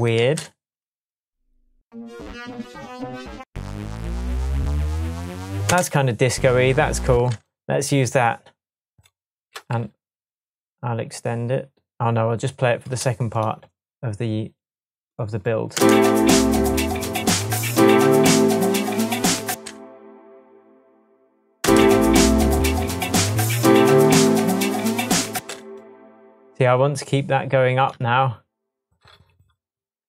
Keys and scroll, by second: 0.2 space, 5.6 space, 7.1 space, 15.7 space, 19.5 space, 21.6 space, 25.3 space.